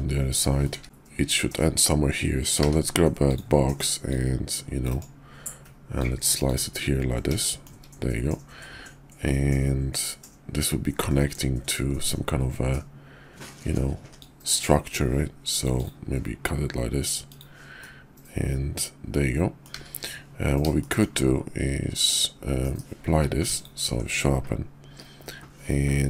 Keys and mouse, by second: 0.7 `, 2.5 d, 4.1-5.0 drag, 5.9-6.6 drag, 7.3 typing, 7.4 shift+middle drag, 14.1-15.9 drag, 14.3-15.7 typing, 17.2 click, 17.7-19.6 middle drag, 19.7 `, 20.8 shift+middle drag, 21.8 KP_5, 22.6 KP_5, 23.0 q.